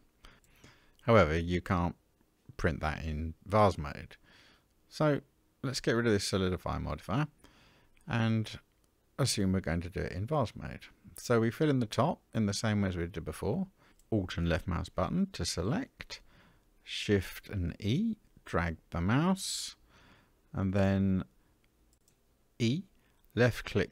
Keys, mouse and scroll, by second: 6.9 click, 7.6-9.4 middle drag, 9.6-10.0 scroll up 1, 11.0 Tab, 13.8 alt+click, 16.1 shift+e, 22.0 e.